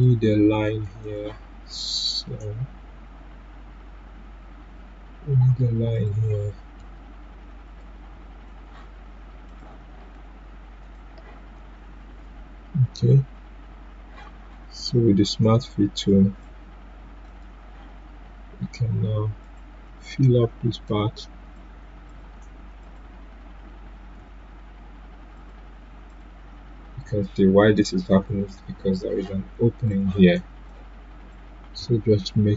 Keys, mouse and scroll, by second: 5.9 click, 5.9 click, 10.8 right click, 16.0 right click, 16.0 click, 24.1 ctrl+z, 25.3 click, 28.5 ctrl+z, 29.9-32.5 drag.